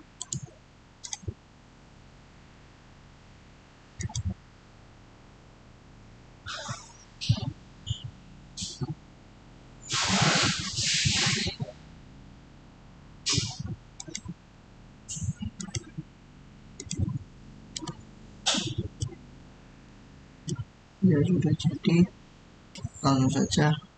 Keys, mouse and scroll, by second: 0.1 right click, 0.9 click, 3.8 click, 3.9 click, 13.8 click, 13.9 click, 14.7 scroll down 1, 15.5 click, 18.4 scroll down 1, 18.5 middle click, 19.2 scroll up 1, 19.7-22.5 middle drag.